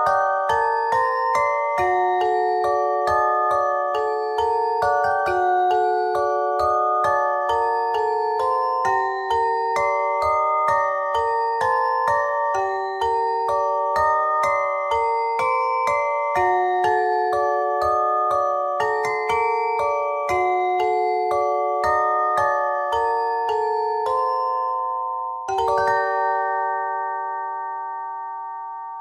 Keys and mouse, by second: 0.0-2.5 middle drag, 6.5 ctrl+Tab, 7.7 z, 8.1 c, 12.3-15.4 drag, 15.4 s, 18.4 s, 18.8 click, 20.4 s, 22.6 e, 24.3 s, 26.3 e, 28.3 KP_3.